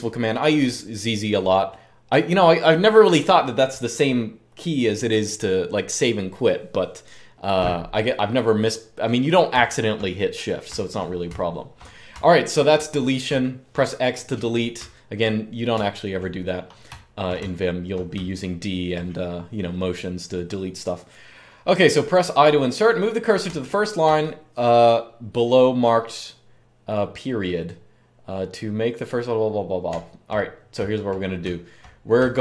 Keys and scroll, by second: 9.3-13.3 typing, 14.5-18.9 typing, 23.2-23.8 typing, 29.6-31.9 typing.